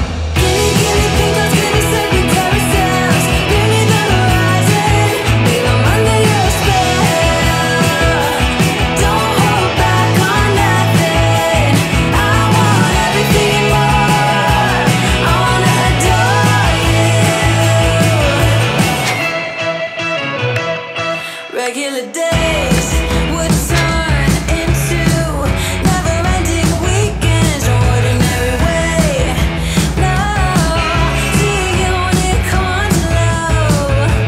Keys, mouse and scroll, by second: 4.9-5.8 scroll up 1, 5.8 s, 6.3 click, 8.2-9.7 middle drag, 10.0-10.8 scroll down 1, 10.8-14.2 drag, 15.7-16.2 scroll up 1, 16.2-16.8 middle drag, 17.7 click, 22.1 ctrl+c, 22.6 click, 26.2 ctrl+d, 26.8-29.0 drag, 29.9-30.9 drag.